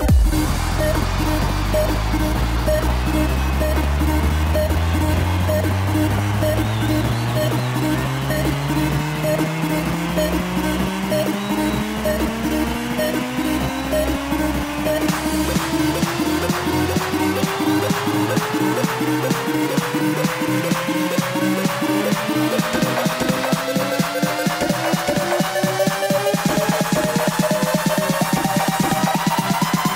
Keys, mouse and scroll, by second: 2.6-3.3 scroll down 6, 3.3 ctrl+r, 6.3-7.9 scroll up 2, 7.9 click, 8.7 ctrl+r, 11.4-11.9 scroll up 1, 11.9 ctrl+r, 14.9 click, 26.1-27.6 middle drag, 27.6 click, 29.8 Tab.